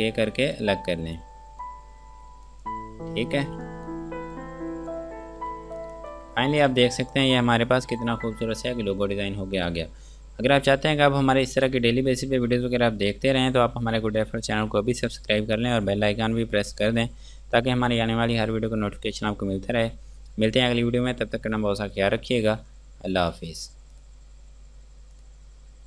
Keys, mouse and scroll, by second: 0.1 ctrl+k, 0.8 click, 3.3-3.7 scroll down 1, 3.7 F2, 3.9 click, 5.4 scroll down 1, 5.6 Escape, 6.0 click, 6.7 shift+F2, 7.6 F9, 24.2 click.